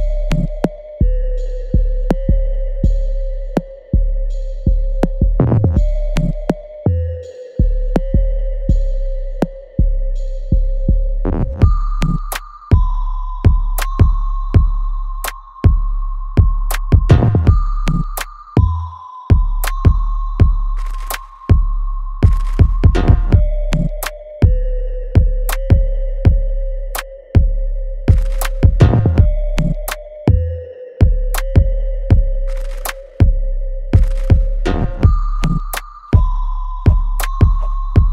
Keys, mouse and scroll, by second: 2.7-5.7 ctrl+drag, 5.7-10.3 ctrl+drag, 10.3-13.3 ctrl+drag, 13.3 alt+click, 13.7 alt+middle click, 14.3 alt+right click, 14.9-17.5 alt+drag, 17.5-26.6 ctrl+drag, 26.6 ctrl+click, 27.8-29.4 ctrl+drag, 29.4 ctrl+z, 30.3-32.6 ctrl+drag, 32.6 click, 38.0 click.